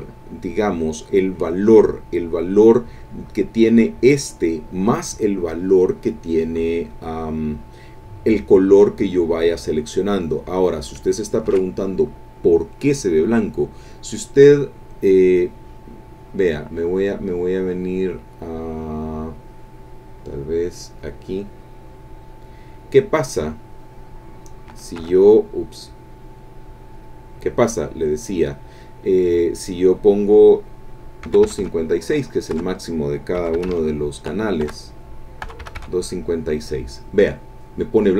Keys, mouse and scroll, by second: 10.1 click, 11.5 ctrl+z, 20.8 click, 23.6-24.6 drag, 25.0 Escape, 26.9 click, 31.3 KP_2, 31.4 KP_5, 31.6 KP_6, 33.1 Tab, 33.4 KP_2, 33.5 KP_5, 33.7 KP_6, 34.7 Tab, 35.4 KP_2, 35.6 KP_5, 35.8 KP_6.